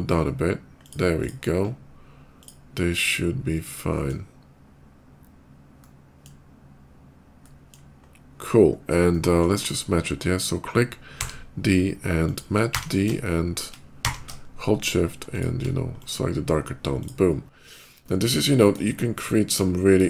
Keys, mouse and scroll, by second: 0.7 click, 1.1 click, 2.2 click, 2.7-3.9 middle drag, 5.6 middle click, 7.2 middle click, 8.4 scroll up 2, 9.0 shift+middle click, 10.1 shift+click, 10.4 shift+click, 10.9 d, 12.1 click, 13.1 click, 13.1 shift+d, 13.8 d, 14.2 click, 15.2 click, 15.8 shift+click, 16.1 shift+middle click, 16.4 shift+middle click, 16.7 shift+click, 17.2 shift+middle click, 17.8 shift+middle click, 18.7 shift+middle click, 19.9 shift+middle click.